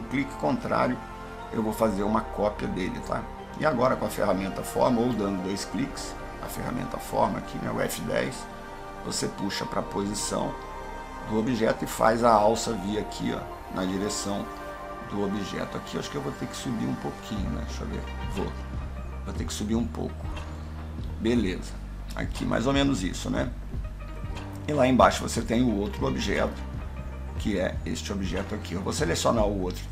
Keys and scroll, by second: 3.7 F10.